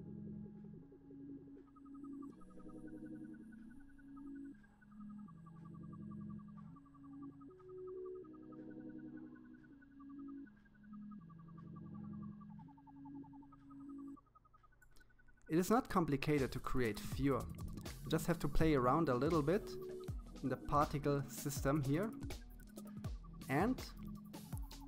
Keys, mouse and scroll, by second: 0.0-1.6 drag, 2.7-4.3 drag, 5.3-6.2 scroll up 1, 6.2 f, 9.2-10.5 drag, 10.5-11.0 scroll down 2, 11.0-12.5 middle drag, 12.9 KP_1, 13.9-15.4 shift+middle drag, 15.9-17.5 drag, 20.9-22.5 drag.